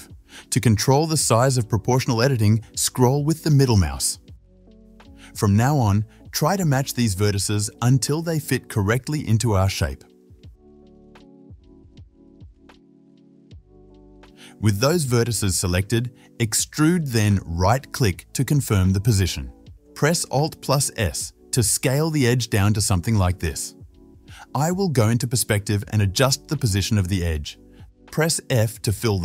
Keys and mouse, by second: 1.2-14.1 middle drag, 6.8 g, 11.0 g, 12.4 g, 14.1-17.8 right drag, 16.1 e, 17.8 middle click, 18.0 o, 19.5 alt+s, 22.4 shift+z, 22.5-26.4 shift+middle drag, 22.8 alt+shift+s, 24.4 shift+z, 26.4-29.2 drag, 28.7 f.